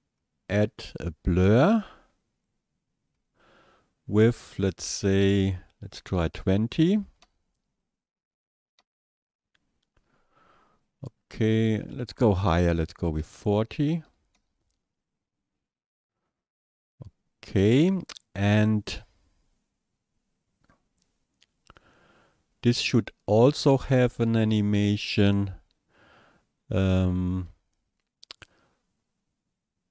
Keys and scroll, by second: 6.2 KP_2, 6.4 KP_0, 7.2 Return, 13.0 KP_4, 13.2 KP_0, 14.4 Return.